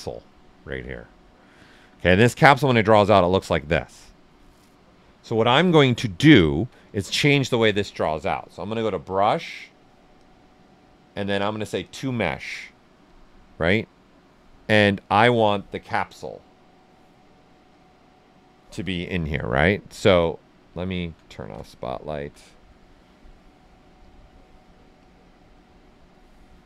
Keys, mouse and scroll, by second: 2.6-5.5 drag, 5.5 ctrl+z, 5.9 ctrl+right click, 8.7 click, 13.3-14.6 right drag, 14.6 click, 19.6 right click, 21.3 shift+z, 21.9 alt+right click, 24.0 click.